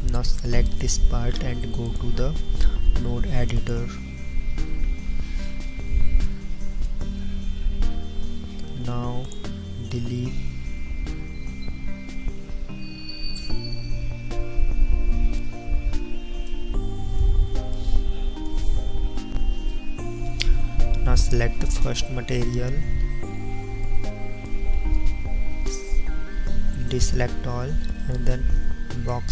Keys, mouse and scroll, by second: 1.9 click, 19.3 ctrl+shift+2, 22.1 ctrl+shift+1.